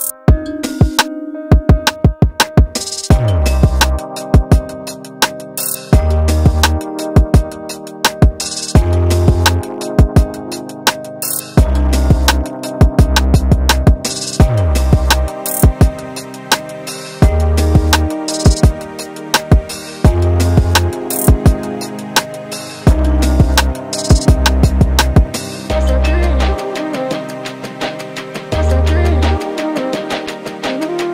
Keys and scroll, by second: 0.9 3, 3.1 4, 8.2 3, 8.7 [, 9.3 ], 10.3 4, 18.7 4, 19.5 3, 21.0 ], 21.8 ], 22.9 4, 24.7 3, 24.9 ], 25.7 ], 26.8 4, 30.8 3.